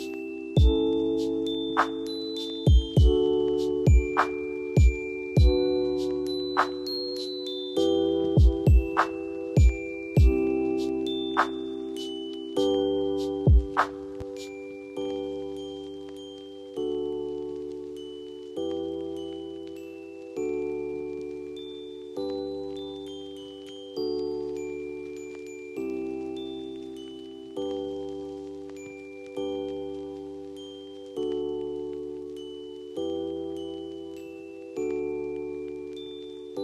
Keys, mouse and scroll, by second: 12.8 alt+scroll, 12.9-14.0 scroll up 1, 14.0 scroll up 1, 16.8 ctrl+j, 23.5 ctrl+0, 25.6 ctrl+s, 34.9 click.